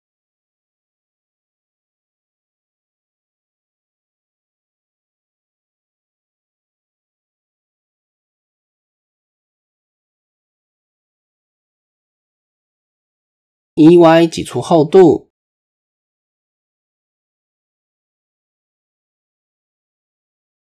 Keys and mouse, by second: 2.3 click, 3.7 click, 4.5-6.6 drag, 7.0 a, 7.5 click, 9.0 click, 9.9 r, 11.6-12.6 middle drag, 12.9 KP_3, 14.2 e, 16.7 a, 17.2-18.7 drag, 20.3 click.